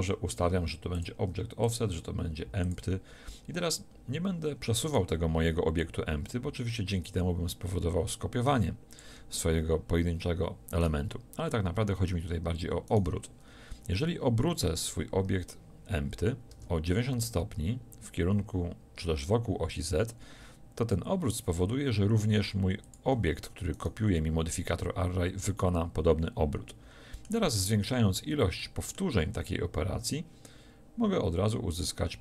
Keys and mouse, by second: 0.9-3.6 drag, 4.9-8.4 drag, 10.8-16.5 drag, 16.5 r, 25.3 middle click, 30.5-31.7 middle drag.